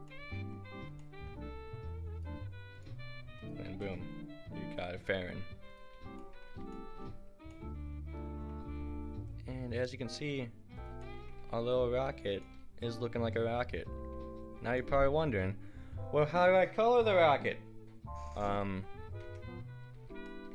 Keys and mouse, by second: 0.1-2.2 middle drag, 2.2 click, 3.4-5.1 middle drag, 3.7 r, 5.9 a, 9.3 right drag, 10.4-11.2 drag, 11.3 g, 14.5-14.8 middle drag, 19.0 ctrl+z, 20.0 a.